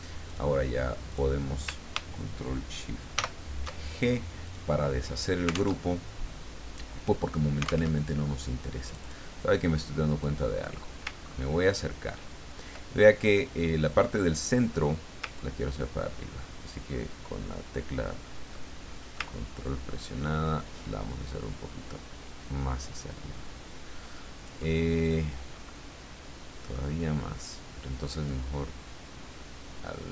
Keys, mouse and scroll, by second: 0.3 click, 1.1 click, 3.1 ctrl+shift+g, 4.5 click, 5.8 alt+Tab, 7.9 alt+Tab, 8.9 click, 10.2 click, 11.2-11.9 ctrl+scroll up 2, 15.4-24.6 ctrl+drag, 25.7-27.0 middle drag, 28.2-30.1 drag.